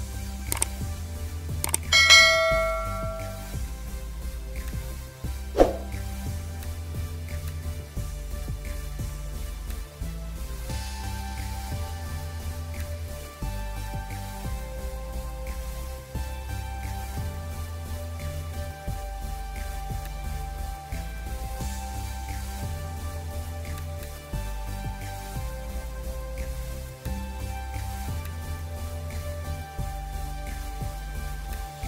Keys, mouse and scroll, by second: 11.2 v, 12.7 alt+click, 17.6 Return, 20.0 ctrl+click, 26.9 alt+click, 31.4 alt+click.